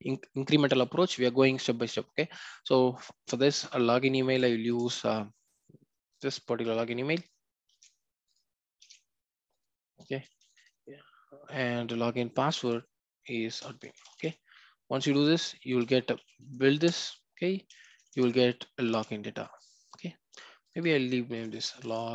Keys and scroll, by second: 3.5 Return, 7.7 ctrl+x, 16.8 Return, 17.8 alt+Return.